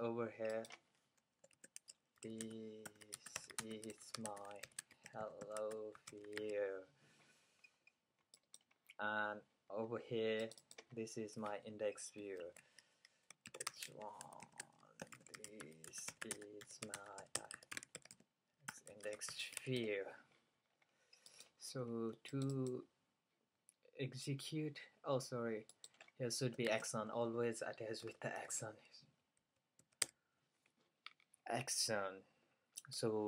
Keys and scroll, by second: 1.7-7.1 typing, 8.4-9.2 typing, 12.5 super+a, 13.3-22.0 typing, 26.7 shift+a, 28.1-30.6 typing, 32.1-32.5 typing.